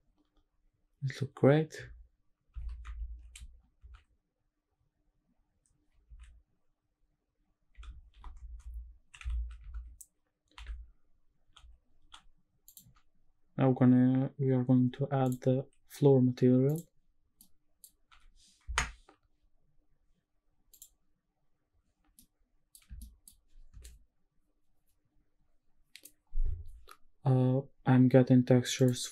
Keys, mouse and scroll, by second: 2.5 shift+`, 15.2 click, 16.7 click, 17.4-17.8 middle drag, 18.2 g, 18.7 Escape, 20.7 click, 22.2 middle click, 22.8 shift+middle click.